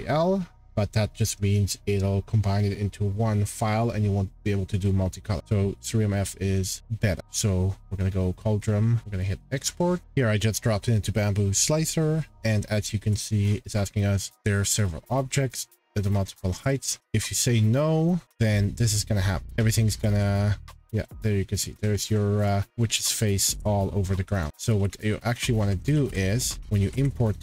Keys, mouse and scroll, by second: 1.0 middle click, 3.0 scroll, 4.8 scroll, 5.4 click, 10.0 click, 18.5 click, 19.9 click, 20.7 click, 21.1 click, 21.6-22.2 scroll, 22.2 middle click, 22.4 click, 22.7 click, 23.2 click, 23.8 middle click, 24.4 click, 24.5 click, 24.7 ctrl+z, 25.1-25.9 scroll, 25.9 ctrl+z, 26.6 scroll, 26.8 ctrl+z.